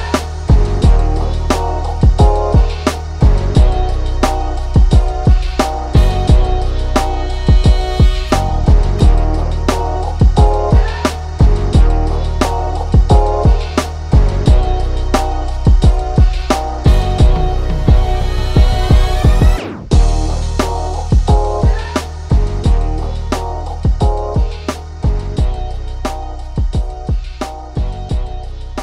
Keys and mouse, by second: 3.1 ctrl+r, 3.5-4.7 middle drag, 5.1-8.8 middle drag, 9.1 click, 9.9-12.1 ctrl+middle drag, 12.1 Tab, 12.7-15.1 shift+middle drag, 15.1 ctrl+s.